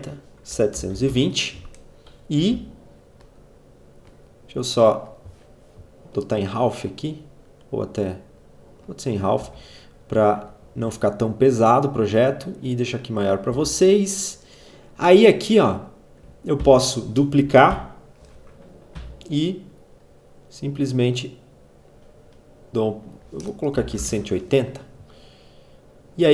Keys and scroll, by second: 0.0-1.9 typing, 8.9 z, 13.0 v, 16.0 ctrl+d, 17.2 alt+Page_Down, 18.4 r, 23.0-24.0 typing, 25.6 z.